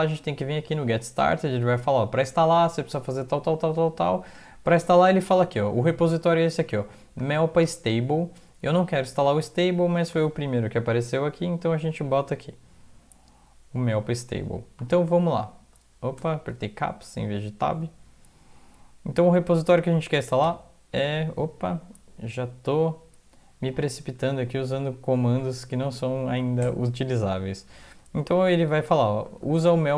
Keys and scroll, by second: 14.9 Caps_Lock, 16.7 alt+Tab, 20.5 ctrl+v, 24.6 Down, 24.7 Down, 24.9 Down, 25.0 Down, 25.5 Down, 25.6 End, 25.9 Left, 26.6 ctrl+y, 28.0 Home, 29.1 ctrl+Right, 29.5 ctrl+Left.